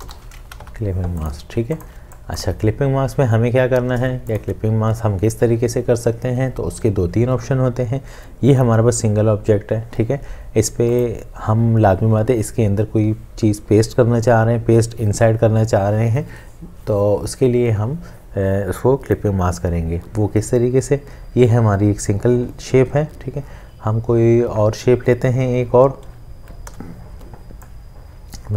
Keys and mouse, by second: 0.0-0.5 typing, 0.6 Escape, 1.6 ctrl+space, 3.9 ctrl+space, 26.7 l.